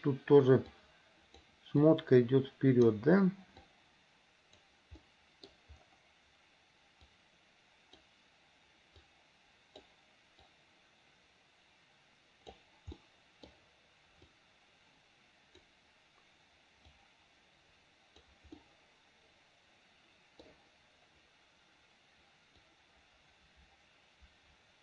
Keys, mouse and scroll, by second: 0.8 click, 2.0 click, 3.8 click, 5.2 middle click, 7.2 click, 9.2 click, 10.7-12.8 drag, 13.2 middle click, 14.4-15.9 drag, 17.0-18.5 drag, 18.7-20.7 middle drag, 22.6-24.8 drag.